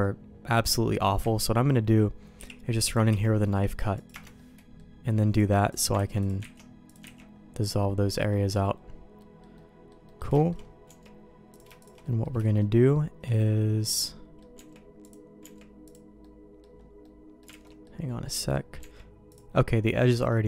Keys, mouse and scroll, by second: 0.5 middle click, 1.2 KP_1, 2.4 k, 4.3 middle click, 5.3 click, 5.9 ctrl+x, 6.2 click, 6.5 ctrl+x, 6.9 click, 7.1 ctrl+x, 7.8 middle click, 9.2 middle click, 9.5 middle click, 10.0 middle click, 10.3 shift+middle click, 10.8 Tab, 11.5 click, 11.8 shift+click, 12.0 middle click, 12.4 shift+middle click, 13.3-14.4 middle drag, 14.5 Tab, 15.0 click, 15.4 Tab, 15.8 click, 16.2 middle click, 17.0 middle click, 17.6 alt+a, 17.6 middle click, 18.4 middle click, 18.8 Tab, 19.3 click, 20.0 middle click.